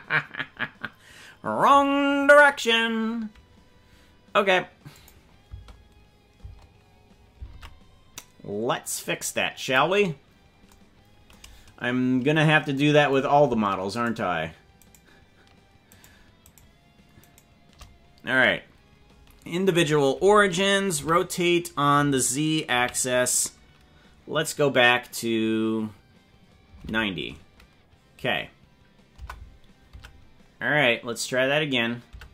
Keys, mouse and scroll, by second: 5.0 click, 5.5 space, 6.5 space, 7.5 ctrl+Tab, 9.1 click, 10.3 scroll down 3, 11.5-11.8 scroll down 2, 14.0 shift+right click, 15.0 shift+right click, 15.9 shift+right click, 16.6 shift+right click, 17.4 shift+right click, 21.0 r, 30.0 Tab, 32.2 Tab.